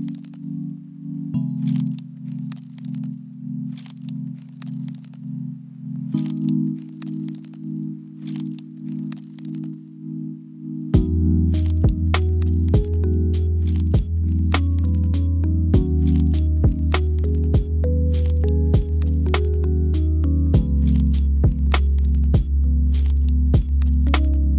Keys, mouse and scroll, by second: 0.5 3, 0.9 middle click, 1.9 x, 3.2 2, 4.2 alt+click, 4.7 KP_1, 5.7 e, 8.3 KP_7, 9.7 e, 12.5 s, 15.8 m, 16.7 middle click, 18.0 middle click, 18.6 KP_1, 19.7 shift+click, 19.7 shift+middle click, 19.9 shift+click, 20.0 shift+middle click, 20.9 Tab, 21.8 click, 22.6 click.